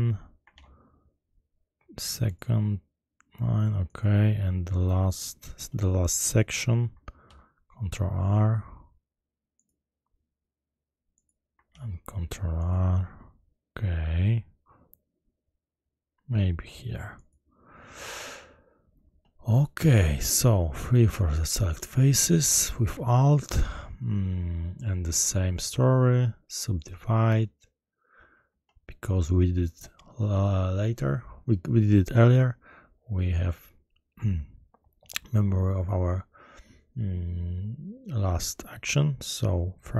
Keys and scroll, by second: 0.5 ctrl+r, 7.2 ctrl+shift+r, 11.6 ctrl+r, 20.9 shift+3.